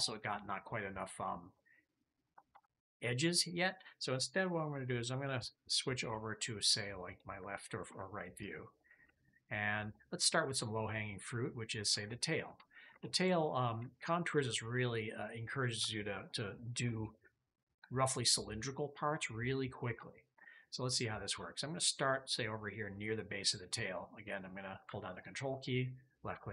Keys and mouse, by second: 1.4 click, 2.4 ctrl+z, 3.0 click, 7.8 `, 9.1 shift+middle click, 11.2 ctrl+middle click, 12.0 shift+middle click, 12.5 ctrl+click, 12.9 shift+click, 13.8 ctrl+click, 14.1 ctrl+shift+middle click, 14.6-20.0 shift+middle drag, 20.1 shift+click, 20.2 shift+middle click, 25.1 ctrl+click.